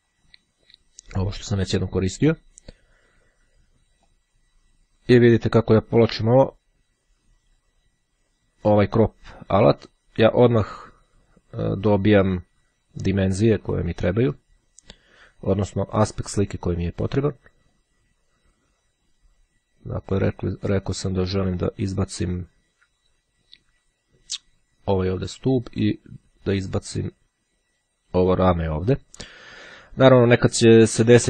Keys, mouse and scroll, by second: 0.4 click, 4.2-12.5 drag, 13.4-16.1 drag, 17.9-21.9 drag, 25.4-27.7 drag.